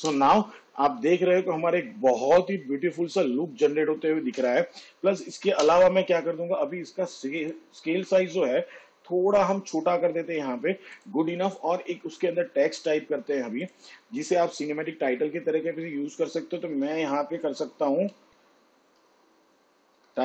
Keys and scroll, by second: 1.0 space, 5.3 space, 6.5 space, 9.0 s, 18.9 s, 20.0 p.